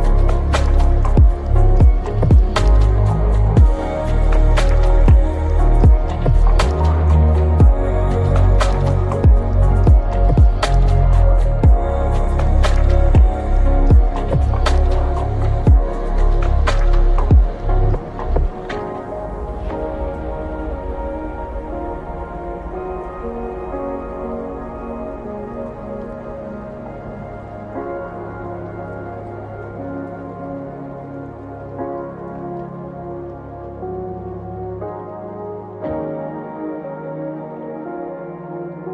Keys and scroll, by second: 17.6 BackSpace, 18.1 1, 19.2 BackSpace, 19.7 Return, 28.2 ctrl+c, 35.8 ctrl+c, 36.5 ctrl+v.